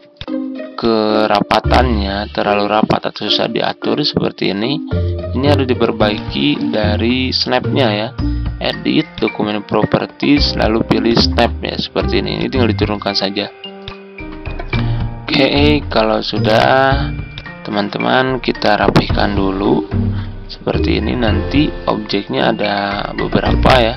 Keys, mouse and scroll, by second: 0.1 shift+click, 0.7-15.7 drag, 17.3 shift+click, 18.6 shift+Left, 19.1 typing, 23.4 click.